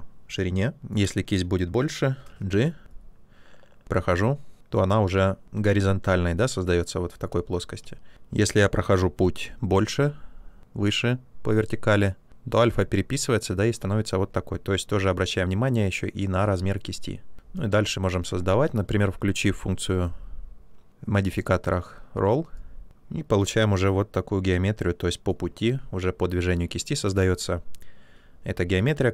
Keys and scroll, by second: 0.8 space, 2.1 g, 2.5 g, 2.8 g, 7.7 space, 8.1 g, 18.2 ctrl+z.